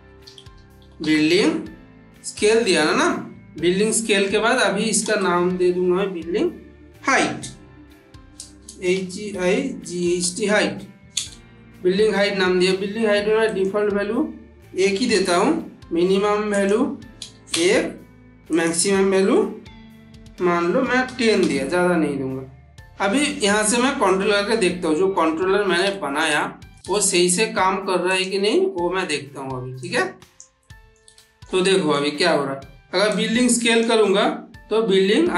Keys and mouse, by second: 0.0-0.8 typing, 4.9 space, 8.5-10.1 typing, 13.3 click, 16.4 click, 23.1-23.7 middle drag, 24.6-25.3 middle drag, 27.9 click, 28.9 ctrl+middle click, 29.7-30.3 click, 30.5-31.3 middle click, 31.0 shift+middle click, 33.0-33.9 click, 34.1-35.3 middle drag.